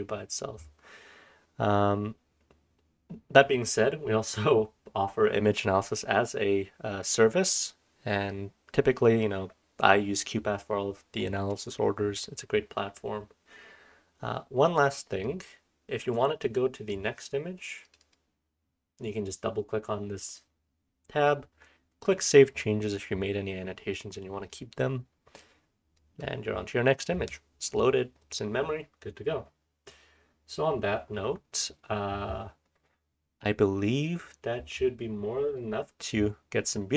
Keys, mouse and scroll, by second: 1.7-3.8 scroll down 1, 3.8-7.2 scroll down 1, 7.2-10.3 scroll down 1, 10.3-11.2 scroll up 2, 11.2-11.9 scroll down 1, 11.9-12.4 scroll up 1, 12.4-15.1 scroll down 1, 15.1 click, 15.2-16.4 scroll down 1, 17.8 click, 18.0 click, 26.5-29.4 scroll up 1, 29.4-32.3 scroll down 1, 32.3-36.9 scroll down 1.